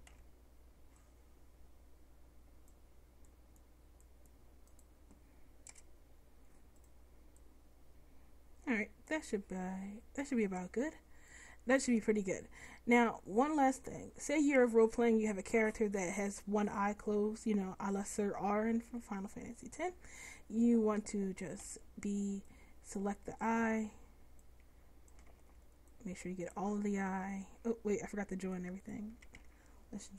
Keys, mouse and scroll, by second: 0.2 c, 0.7-3.5 middle drag, 5.8 Delete, 7.5-9.0 drag, 18.2 Tab, 19.0 Tab, 21.7 b, 25.4 ctrl+z, 28.0 Tab, 29.2 a, 29.6 a.